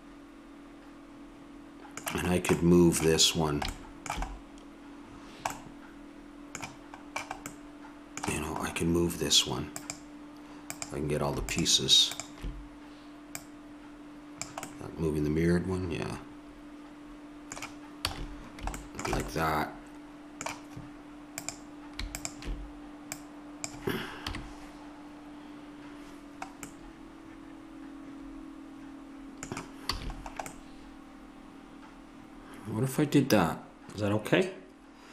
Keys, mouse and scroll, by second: 9.7-15.1 drag, 14.7-15.9 middle drag, 18.1 a, 21.3-23.6 drag, 24.3 KP_3, 28.5-29.9 middle drag, 29.9 a, 30.1 middle click, 33.0 middle click, 34.7 middle click.